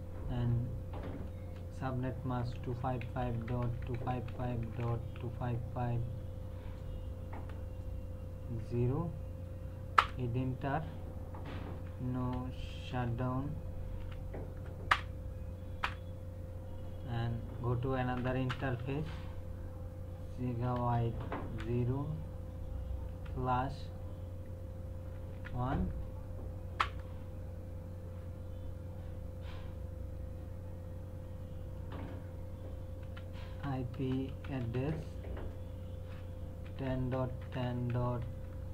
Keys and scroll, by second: 1.4-5.6 typing, 7.4 BackSpace, 8.6 KP_0, 10.0 Return, 11.5-14.0 typing, 14.9 Return, 17.9-19.3 typing, 20.6 g, 20.9 space, 21.6 KP_0, 23.1 /, 25.3 KP_1, 26.8 Return, 33.0-35.1 typing, 36.6-38.7 typing.